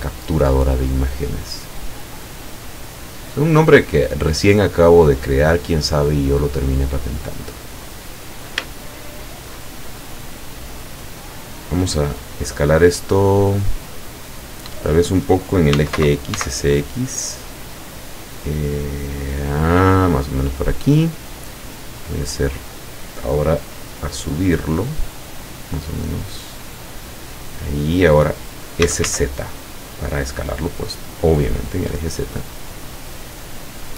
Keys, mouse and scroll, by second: 1.3-1.6 scroll down 2, 2.6-5.2 drag, 5.6 scroll down 1, 6.4-7.8 middle drag, 7.9-8.4 scroll up 1, 9.0-9.7 shift+middle drag, 10.3-11.6 drag, 13.4-15.0 middle drag, 15.8 s, 16.0 x, 20.3 click, 21.2 middle click, 24.4-28.4 drag, 28.9 s, 29.1 z.